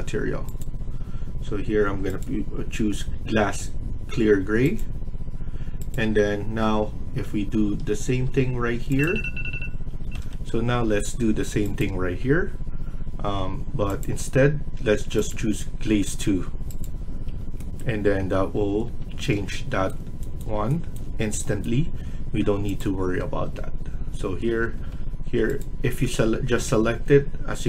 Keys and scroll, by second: 7.1 Escape, 8.1 Tab, 10.1 F1, 18.4 Escape, 18.7 Escape, 24.4 Escape, 24.8 Escape.